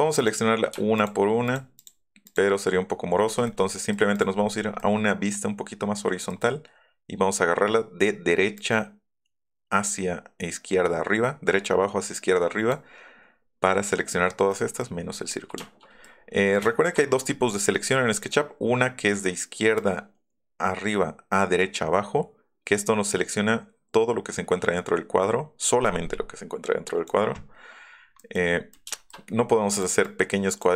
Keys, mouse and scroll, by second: 0.1 click, 0.9 shift+click, 1.5 shift+click, 1.8 shift+click, 2.2 shift+click, 4.4 middle click, 6.3-7.6 middle drag, 11.5-12.7 drag, 14.5 click, 15.3 click, 16.1 middle click, 16.2 middle click, 16.5 shift+middle click, 17.4 middle click, 18.1-19.5 middle drag, 19.7-22.6 drag, 27.9 middle click, 27.9 scroll up 2, 28.2 middle click, 28.5 middle click, 28.5 scroll up 2, 29.7 click, 30.0 click.